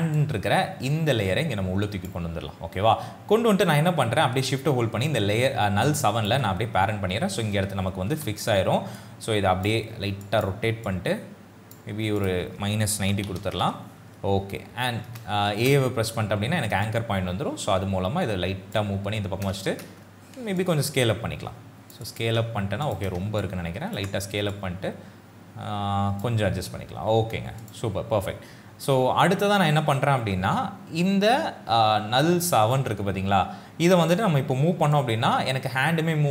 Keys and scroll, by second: 8.1 r, 13.0 KP_Subtract, 13.4 KP_0, 13.6 Return, 15.6 shift+a, 19.7 shift+s.